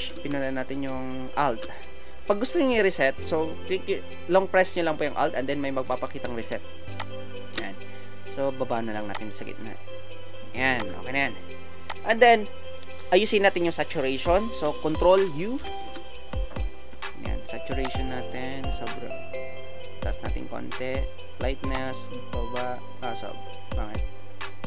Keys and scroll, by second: 15.5 ctrl+u.